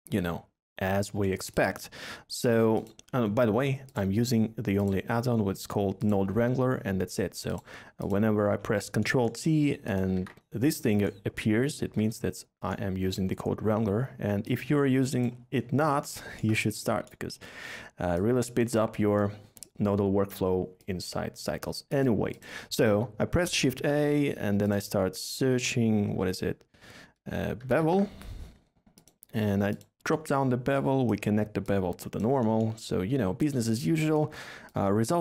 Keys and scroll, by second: 10.1 ctrl+t, 11.8 ctrl+z, 23.7 a, 27.6 typing.